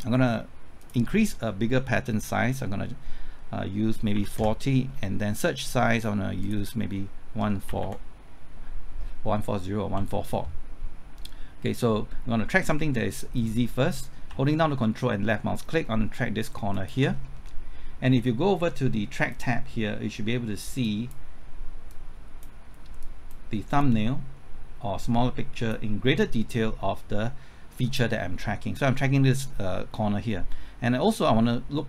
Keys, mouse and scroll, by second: 4.1 KP_4, 4.4 KP_0, 5.9 click, 7.4 KP_1, 7.7 KP_4, 13.4 right click, 14.3 typing, 16.7 ctrl+click, 17.1 scroll up 1, 17.5-18.8 middle drag, 19.3-25.8 drag.